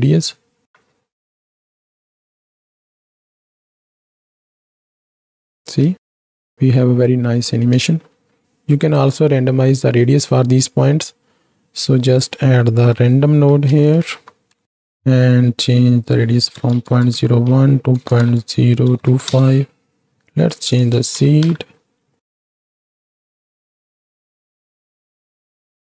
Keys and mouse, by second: 0.4 space, 0.6 shift+Left, 5.7 space, 7.9 ctrl+space, 8.4 click, 11.0 middle click, 11.7-14.8 drag, 15.0 middle click, 16.0-19.3 drag, 20.3 click, 20.7 click, 21.3 shift+Right, 21.5 shift+Left, 22.3 ctrl+space, 24.0 shift+middle click, 25.6 space.